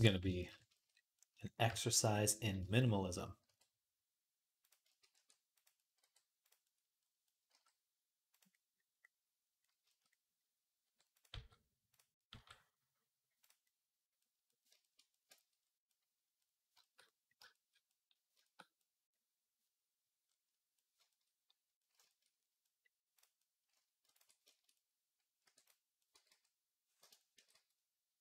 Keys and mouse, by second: 0.0 shift+a, 3.2 r, 4.9 e, 5.8 r, 7.3 g, 10.6 r, 11.1 g, 12.1 g, 17.2-18.5 shift+middle drag, 18.5-25.5 right drag, 23.0 click, 23.0 middle click, 23.9 ctrl+click, 25.2 e, 25.5 middle click, 26.1-28.2 drag, 26.1 x, 27.1 g.